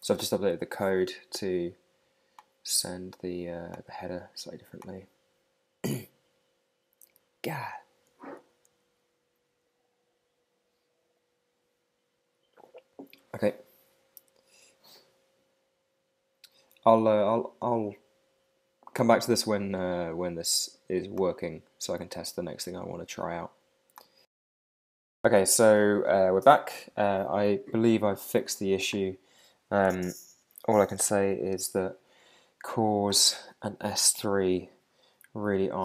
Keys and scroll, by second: 29.5 super+Tab.